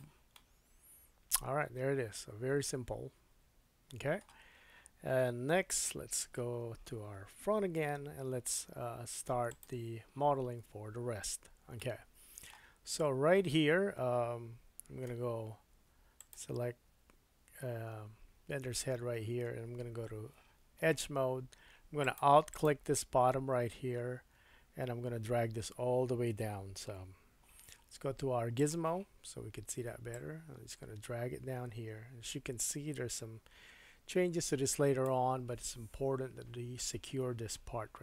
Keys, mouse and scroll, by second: 0.3 middle click, 5.7 KP_1, 7.8 KP_1, 9.4 click, 11.8 shift+middle click, 12.5 shift+middle click, 12.8-14.8 scroll up 4, 15.1 Tab, 15.9 Tab, 16.3-19.8 drag, 16.9 Tab, 20.2 2, 22.0 click, 22.5 alt+click, 28.6-30.1 drag.